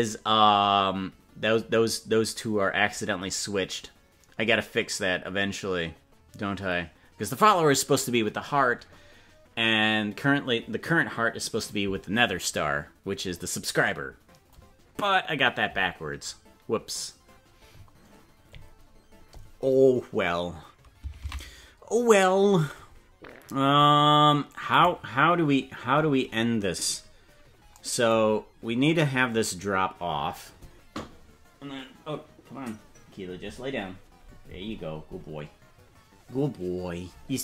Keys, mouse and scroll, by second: 24.8 right click, 27.0 scroll down 3, 28.2-29.0 scroll down 5.